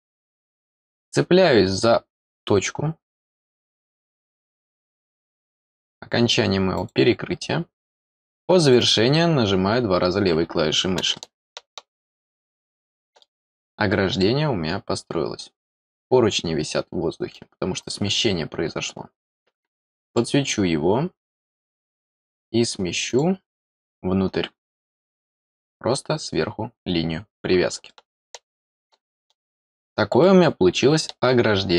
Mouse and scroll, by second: 0.6 scroll up 1, 3.1 click, 3.9 middle click, 6.7 click, 8.6 click, 8.8 click, 10.3 scroll down 1, 11.1-13.2 middle drag, 13.7 scroll down 2, 14.2-17.3 middle drag, 18.1 scroll down 2, 20.0 click, 21.8 click, 23.0 click, 27.8-29.3 middle drag, 29.6 scroll down 1, 30.2-31.2 middle drag, 31.5 scroll down 1.